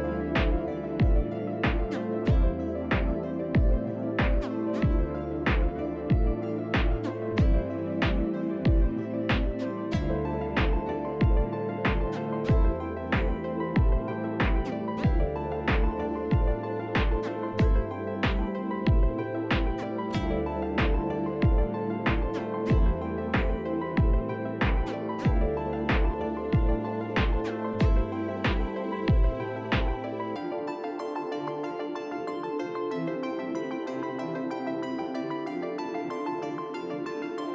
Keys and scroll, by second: 0.2 shift+s, 0.6 shift+s, 1.2 shift+s, 6.6 shift+s, 7.6-9.5 typing, 18.0-20.2 typing, 27.2 shift+s, 27.7 shift+s, 28.4 shift+s, 29.4-31.6 typing, 33.2 shift+s, 33.6 shift+s, 34.4 shift+s, 34.5 shift+s, 36.1 f.